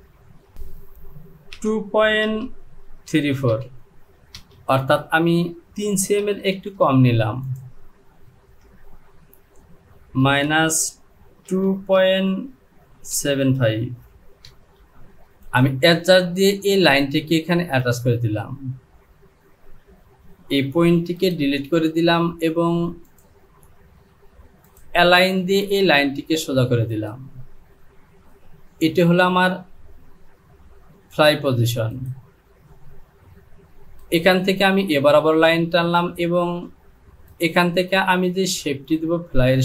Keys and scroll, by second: 0.2 Down, 1.6 KP_2, 2.3 KP_Decimal, 3.1 KP_7, 3.5 KP_5, 4.4 Return, 6.6 ctrl+z, 10.2 KP_Subtract, 11.5 KP_2, 12.0 KP_Decimal, 13.1 KP_7, 13.6 KP_5, 14.5 Return.